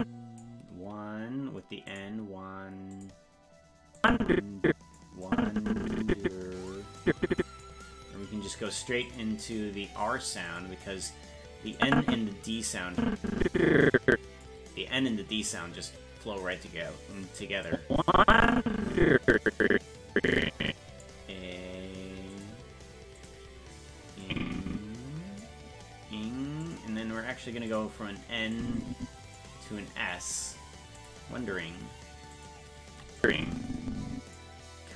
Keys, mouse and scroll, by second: 1.9 click, 2.9 click, 4.0 click, 5.3-6.7 drag, 7.0 click, 9.0 click, 10.5 click, 11.8-14.4 drag, 17.7-21.0 drag, 22.3 click, 23.2 click, 24.2-25.4 drag, 26.6 click, 27.7 click, 28.6 click, 31.0 click, 32.3 click, 33.2-34.4 drag.